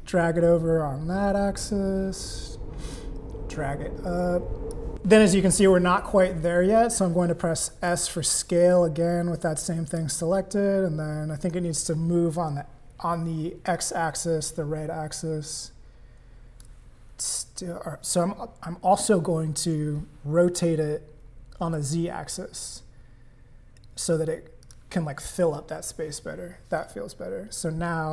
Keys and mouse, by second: 3.2-4.9 drag, 7.9 s, 13.8-17.0 drag, 20.4 r.